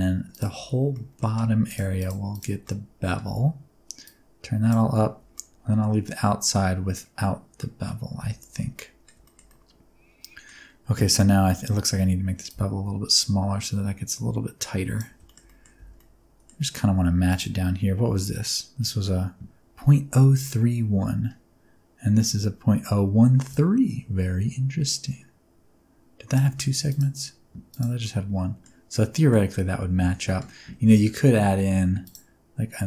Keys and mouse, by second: 0.5 alt+z, 0.8 middle drag, 1.9 shift+click, 2.6-3.0 middle drag, 3.1 alt+z, 4.0 click, 5.3-6.9 middle drag, 7.5 middle drag, 8.1 alt+z, 8.4 alt+z, 8.7 middle drag, 9.2 middle click, 9.4-10.4 middle drag, 12.5-15.0 shift+drag, 15.2 shift+middle click, 15.4 middle click, 15.7 Tab, 15.9-16.4 middle drag, 17.2 right click, 23.5-26.3 shift+drag, 26.8 right click, 28.0 middle click, 28.8 middle click, 29.6 Tab, 30.2 middle click, 30.8 ctrl+r.